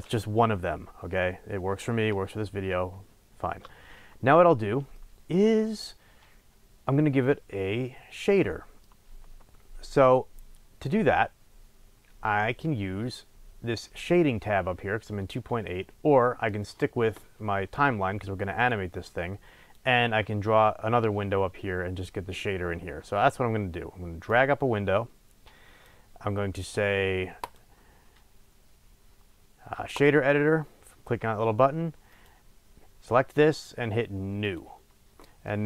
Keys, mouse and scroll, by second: 18.6-32.2 drag, 34.5 click, 35.3-35.6 middle drag.